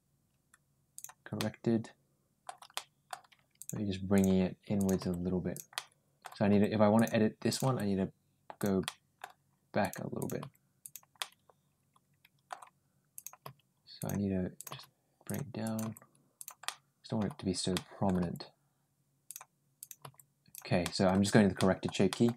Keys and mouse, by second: 0.8 click, 1.2-2.3 middle drag, 2.6 middle click, 3.4 click, 4.0 click, 4.6 click, 4.8 g, 5.6 middle click, 6.3 g, 7.3 click, 7.5 g, 8.7 middle click, 9.6 click, 10.0 click, 10.2 g, 11.0-12.3 middle drag, 13.0 click, 13.2 g, 14.4 click, 14.5 g, 15.5 click, 15.6 g, 16.5 middle click, 17.5 middle click, 18.0 g, 19.6 click, 19.8 g, 20.6 middle click, 21.4 middle click, 21.9 middle click.